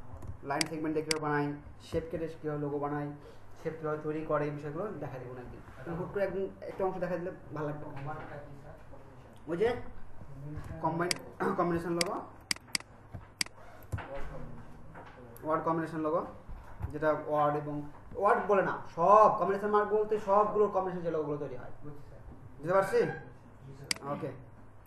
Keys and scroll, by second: 0.2 ctrl+alt+space, 10.6 ctrl+alt+space.